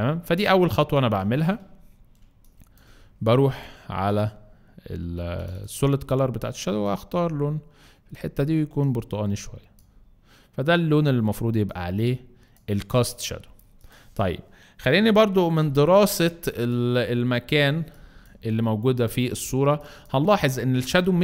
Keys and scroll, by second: 0.5 alt+space, 1.6 alt+space, 2.2 alt+space, 3.1 alt+space, 16.3 space, 17.7 space, 19.6 space.